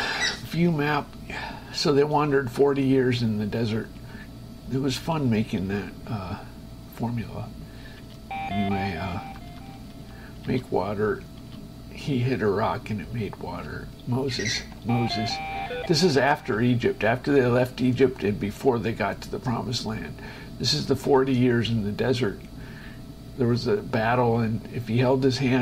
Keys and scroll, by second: 0.5 space, 9.5 Down, 10.6 space, 14.8 shift+Escape, 15.9 space, 16.5 Down, 21.4 space.